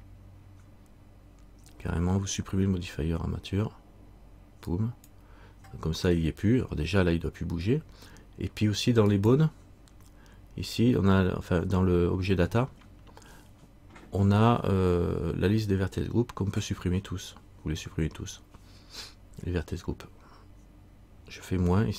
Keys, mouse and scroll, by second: 4.9 click, 9.3 click.